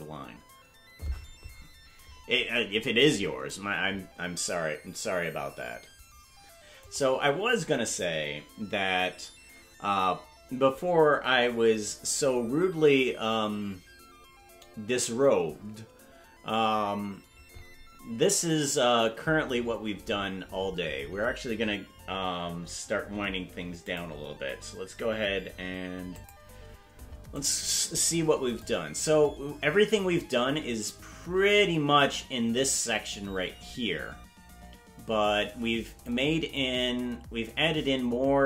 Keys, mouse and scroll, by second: 7.0 click, 28.6-36.1 drag, 36.6-38.4 drag.